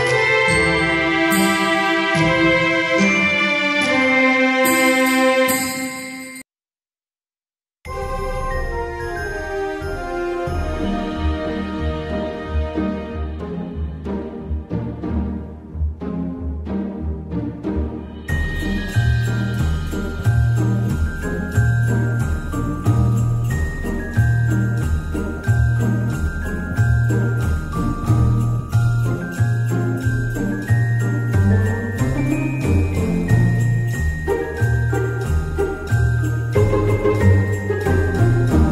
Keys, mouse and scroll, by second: 0.0 click, 14.1 ctrl+z, 14.4 ctrl+z, 21.5 ctrl+z.